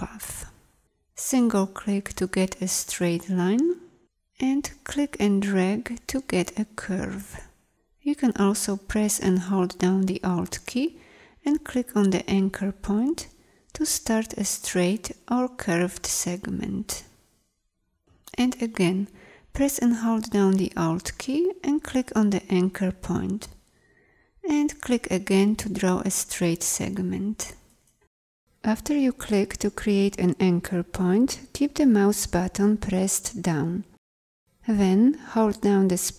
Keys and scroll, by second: 35.3 space.